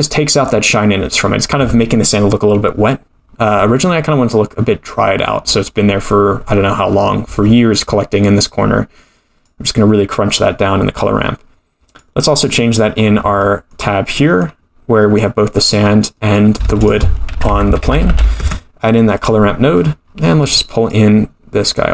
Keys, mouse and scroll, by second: 8.4 click, 11.9 click, 13.0-13.4 scroll down 12, 13.4 middle click, 14.2 middle click, 15.2 click, 15.9-16.3 scroll up 5, 16.2 middle click, 16.6 shift+a, 18.1 r, 19.8-20.5 scroll up 10, 20.9-21.9 drag.